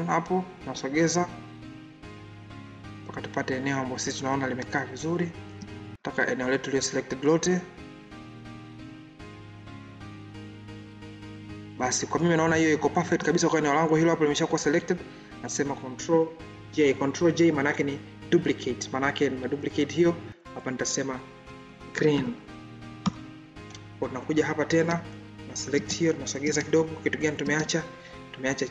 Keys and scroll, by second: 16.4 ctrl+j.